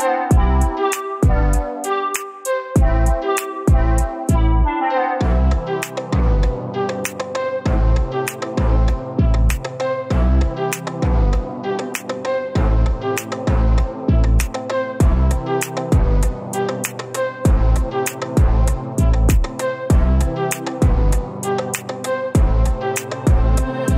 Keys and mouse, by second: 0.0 shift+middle click, 1.1 click, 12.8 click, 20.4 middle click, 20.5-22.0 drag.